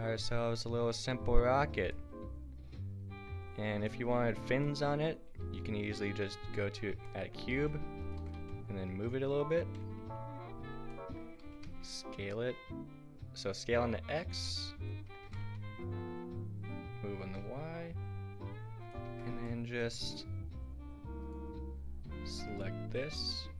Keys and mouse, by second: 5.4 shift+a, 6.7-7.1 middle drag, 7.4 g, 8.2 g, 10.0 KP_Decimal, 11.0-11.4 drag, 11.4 s, 11.7 drag, 14.6-17.4 drag, 15.2 g, 19.1 Tab, 19.5 click, 22.7-23.5 drag, 23.0 g.